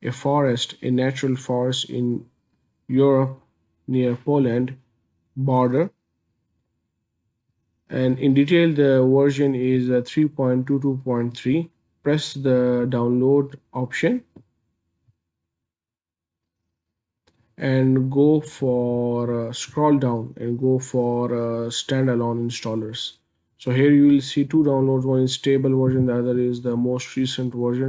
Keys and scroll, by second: 6.4-7.3 scroll down 19, 17.5-19.9 scroll down 44.